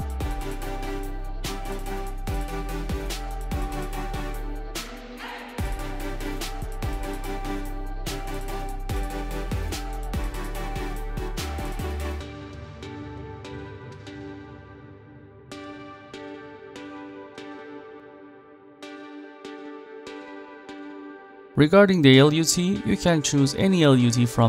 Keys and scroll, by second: 6.5-7.8 typing, 7.9 Return.